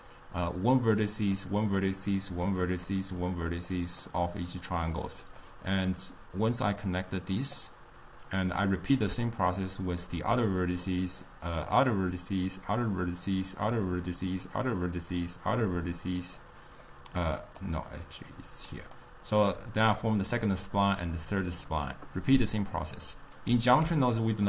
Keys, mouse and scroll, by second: 0.0-6.1 typing, 0.1 click, 1.1 click, 1.6 click, 2.2 click, 2.7 drag, 3.3 click, 3.9 click, 4.8 click, 5.2 click, 6.2-7.6 drag, 7.6-8.9 d, 10.3-22.0 typing, 10.5 click, 11.8 click, 12.7 click, 13.6 click, 14.6 click, 15.8 click, 17.4 right click, 18.4-19.0 drag, 20.1 click, 21.3 click, 22.7 right click, 23.5 d, 24.1-24.4 ctrl+middle drag.